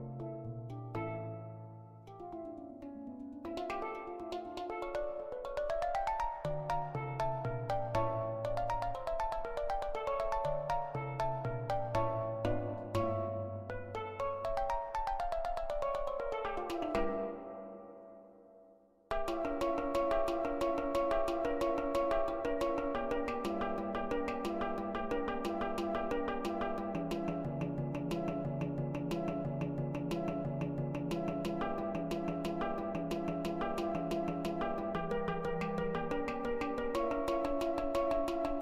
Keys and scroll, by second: 7.5-8.3 typing, 14.8 1, 18.1-20.2 typing, 27.8-29.9 typing.